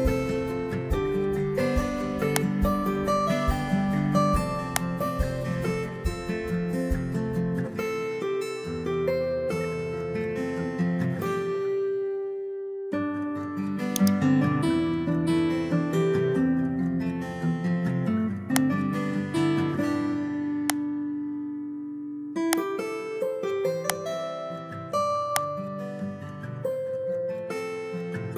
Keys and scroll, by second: 26.7 ctrl+a, 27.9 ctrl+c.